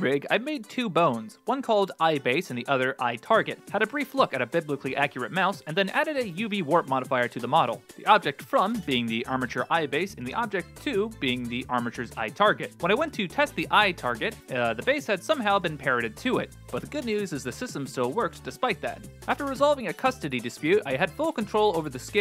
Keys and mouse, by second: 2.4 F2, 3.9 middle click, 4.6-5.6 right drag, 5.6 click, 7.5 click, 10.1 click, 10.8 click, 13.4 shift+space, 13.9 g, 16.6 alt+h, 17.7 g, 19.1 alt+g.